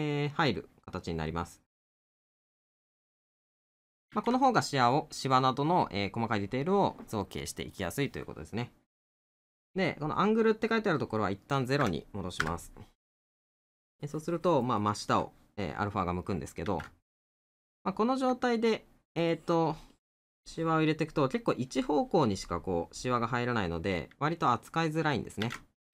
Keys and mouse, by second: 5.7 middle click, 13.3 middle click, 14.8 middle click, 21.0 middle click, 24.0 middle click.